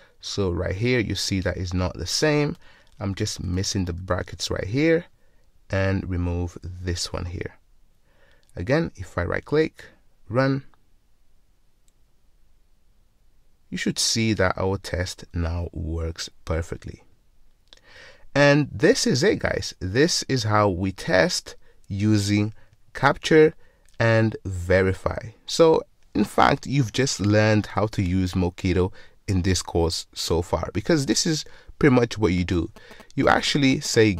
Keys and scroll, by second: 10.3 ctrl+shift+F10.